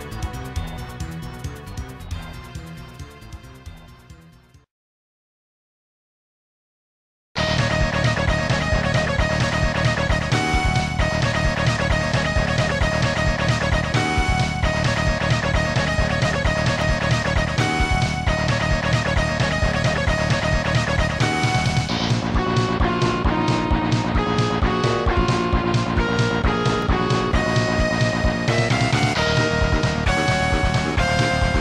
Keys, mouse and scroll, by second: 0.4 click, 0.7 click, 1.2 s, 5.4 click, 12.0 click, 19.0 scroll up 1, 19.7 scroll up 1, 24.2 click, 24.4 typing, 24.9 click, 26.6 ctrl+z, 30.8 click, 31.0 typing.